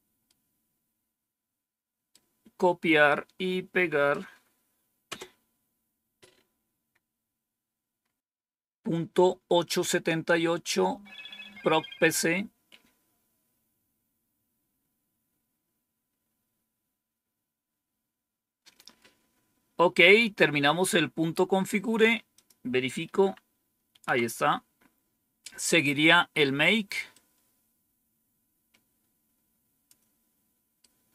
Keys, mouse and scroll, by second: 0.1-2.0 right drag, 3.0-4.0 right drag, 5.0 Return, 7.9 scroll up 2, 20.8-21.7 scroll down 2, 22.2 click, 23.0 Up, 23.9 End, 27.0-29.8 drag, 30.7-31.1 right drag.